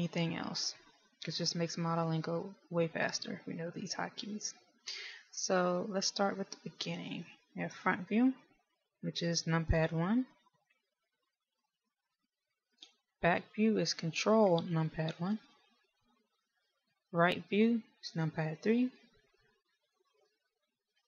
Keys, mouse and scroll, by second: 11.7 KP_1, 15.3 ctrl+KP_1, 19.0 KP_3.